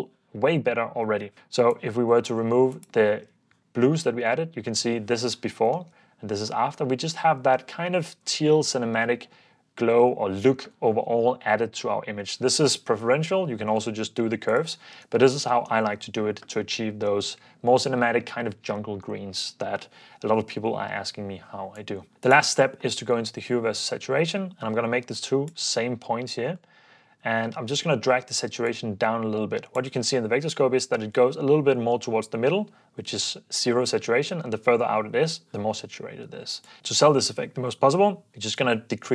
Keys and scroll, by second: 1.3 ↺, 3.3 super+f, 4.2 super+d, 6.0 super+d.